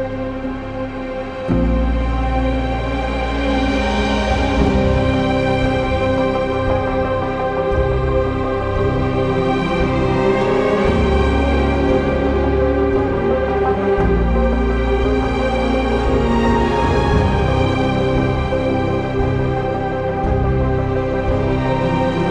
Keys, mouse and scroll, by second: 12.7 ctrl+z, 13.2 click, 14.8 click, 14.9 ctrl+z.